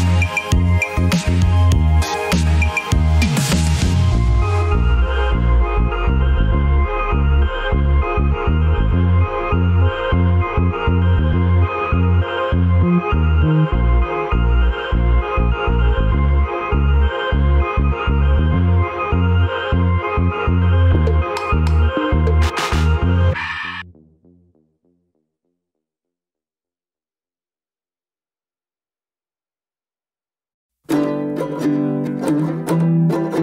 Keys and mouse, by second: 0.3 ctrl+z, 1.2 ctrl+r, 5.1 ctrl+r, 11.8 click, 12.6 Tab, 13.8-18.2 middle drag, 18.4 Tab, 20.0-20.6 middle drag, 21.8-23.2 middle drag, 23.6-24.2 shift+middle drag, 26.7 ctrl+r, 32.4 middle click, 33.0 Tab.